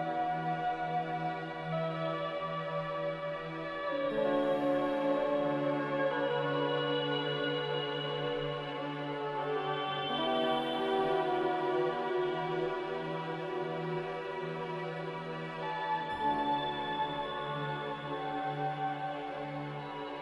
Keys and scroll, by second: 7.1 a, 11.8-12.7 typing, 13.9 r, 16.5 a, 19.9 ctrl+c.